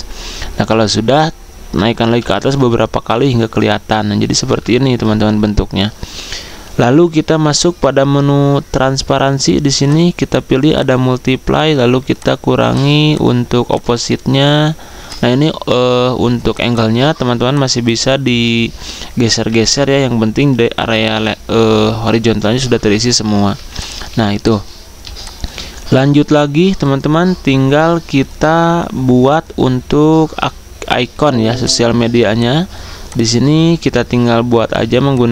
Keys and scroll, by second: 1.7 ctrl+], 2.9 ctrl+[, 4.4 ctrl+], 19.6 ctrl+z, 23.1 Escape, 24.1 z, 30.9 z, 33.7 l.